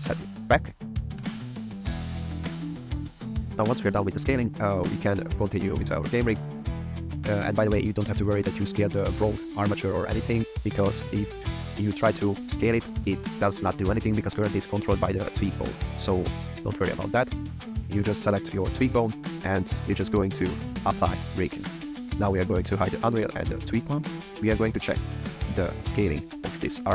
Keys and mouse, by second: 1.1 shift+middle drag, 1.6 shift+middle drag, 1.9 middle click, 5.4 click, 7.7 click, 9.4 click, 9.9 click, 12.0 s, 12.9 click, 13.2 s, 15.7 click, 15.9 click, 16.8 shift+drag, 18.1 click, 19.1 click, 20.9 click, 22.0 click, 22.7 click, 23.6 click, 26.0 shift+middle click.